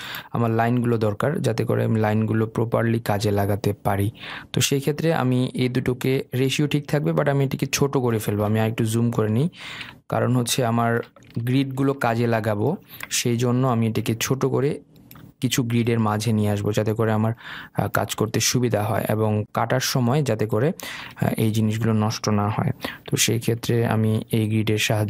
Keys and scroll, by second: 23.3 Down.